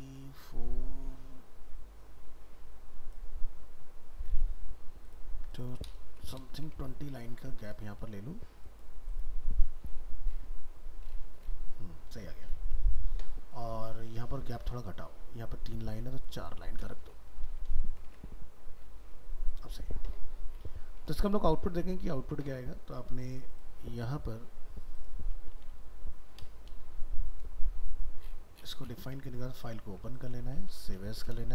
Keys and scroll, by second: 6.9 ctrl+s, 14.1 alt+Tab, 17.7 ctrl+s, 18.1 alt+Tab, 21.9 ctrl+Tab, 25.6 alt+秄, 30.7 alt+秄.